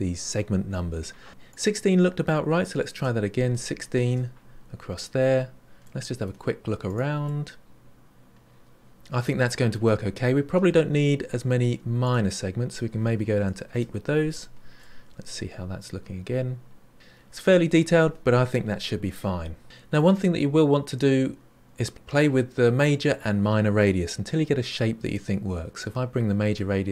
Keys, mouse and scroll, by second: 1.4-4.6 drag, 7.2-10.2 middle drag, 12.0-14.8 drag, 14.8-16.9 middle drag, 19.9-21.5 middle drag, 22.6-24.3 drag, 26.5-26.9 drag.